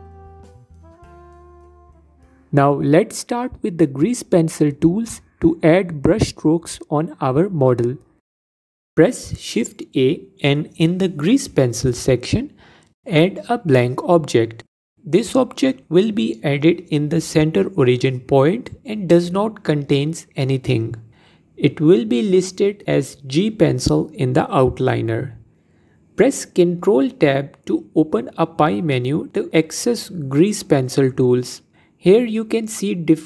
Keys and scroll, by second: 10.8 shift+a, 26.5 ctrl+Tab.